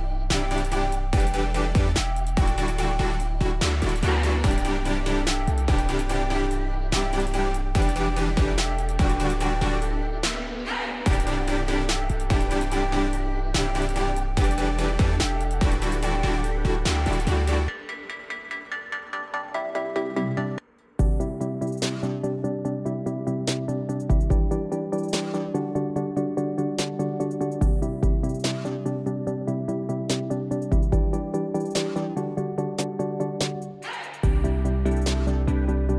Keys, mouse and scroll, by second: 0.7 click, 2.1 click, 2.7 click, 4.2-10.6 typing, 5.8 click, 11.1-12.2 scroll, 12.3 click, 12.8 click, 12.9 scroll down 10, 13.3 click, 14.2 ctrl+c, 14.4 ctrl+d, 15.3 click, 18.4 click, 18.5-19.5 typing, 20.4 click, 21.5 click, 24.6-27.4 typing, 27.6 Return, 29.1 click, 29.2 space, 31.6 typing, 32.0 click, 32.2 right click, 33.9 click, 35.0 right click.